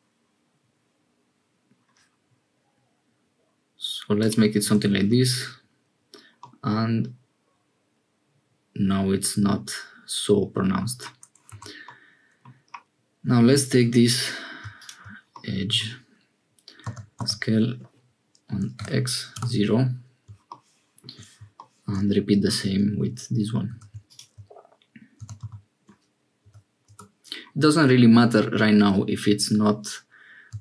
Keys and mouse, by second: 4.7 Tab, 6.4-10.9 drag, 11.6 Tab, 11.9 click, 13.5 2, 15.3 click, 16.8 s, 23.7 2, 25.2 s, 28.8 ctrl+z, 30.5 s.